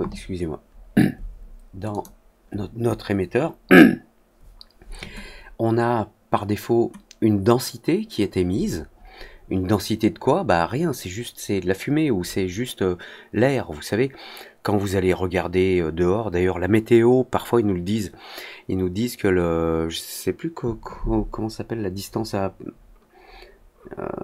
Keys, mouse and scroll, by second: 1.8 click.